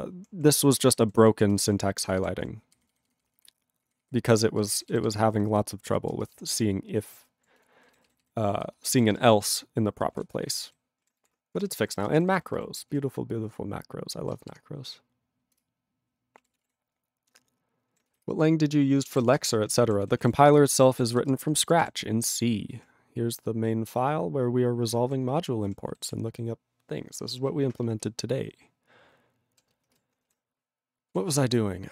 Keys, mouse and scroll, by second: 0.7 ctrl+space, 0.7 ctrl+e, 0.9 ctrl+n, 1.2 ctrl+g, 1.4 ctrl+e, 1.6 ctrl+space, 1.6 ctrl+a, 1.7 ctrl+p, 2.2 ctrl+g, 2.3 ctrl+p, 2.7 ctrl+f, 4.6 ctrl+b, 5.4 ctrl+f, 5.9 ctrl+f, 6.1 ctrl+space, 6.6 ctrl+alt+f, 7.6 ctrl+g, 7.9 ctrl+n, 7.9 ctrl+b, 7.9 ctrl+n, 8.1 ctrl+b, 8.6 ctrl+space, 9.1 ctrl+alt+b, 9.1 ctrl+g, 9.2 ctrl+p, 9.5 ctrl+e, 10.0 ctrl+n, 10.1 ctrl+a, 10.3 ctrl+space, 10.7 ctrl+alt+f, 10.7 ctrl+g, 11.6 ctrl+g, 11.7 ctrl+n, 11.9 ctrl+a, 12.0 ctrl+n, 12.1 ctrl+space, 12.2 ctrl+n, 12.9 ctrl+g, 15.6 ctrl+Return, 16.4 ctrl+a, 16.5 ctrl+space, 16.6 ctrl+e, 16.6 ctrl+g, 18.2 Return, 19.5 Return, 20.1 ctrl+s, 20.2 ctrl+a, 20.3 ctrl+space, 20.5 ctrl+e, 20.9 ctrl+s, 21.1 ctrl+b, 21.3 ctrl+space, 21.7 ctrl+alt+f, 21.8 ctrl+g, 22.4 ctrl+g, 22.8 ctrl+p, 22.9-23.9 ctrl+p, 24.0 ctrl+n, 24.6 ctrl+n, 25.9 ctrl+l, 26.1 ctrl+s, 30.0 ctrl+s.